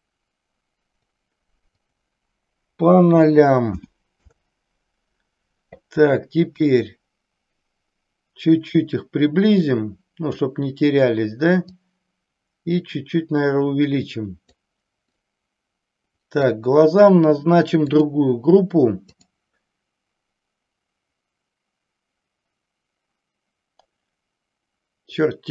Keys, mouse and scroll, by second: 1.8-4.8 drag, 6.5-10.4 drag, 11.7-14.7 drag, 15.0-16.7 middle drag, 17.9 drag, 19.0-25.5 drag.